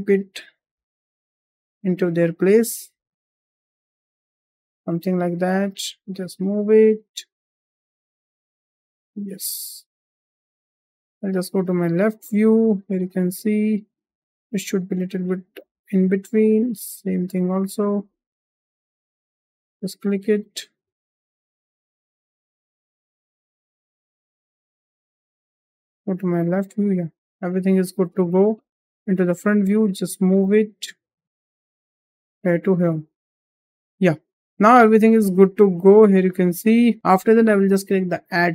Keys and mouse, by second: 0.1 drag, 0.5 g, 2.4-2.7 drag, 3.1 click, 3.7 g, 5.6 click, 6.1 click, 6.4 g, 7.4 drag, 7.8 click, 8.3 g, 12.0 shift+middle drag, 13.1 click, 14.1 g, 15.6 shift+middle click, 16.5-17.0 drag, 17.3 g, 18.8 click, 19.2 click, 19.5 g, 21.8 click, 22.2 g, 23.0 drag, 23.5 middle drag, 24.0 g, 25.4 `, 27.0-27.4 middle drag, 27.9 `, 29.7 g, 32.5 `, 34.2 shift+middle drag, 34.5-35.6 middle drag.